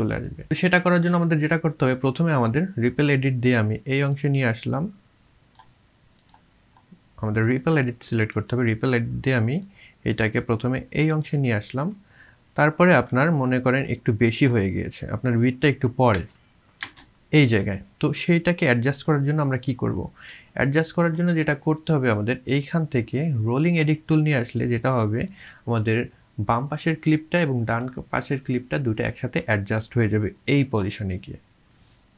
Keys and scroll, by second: 16.2 space, 16.8 space.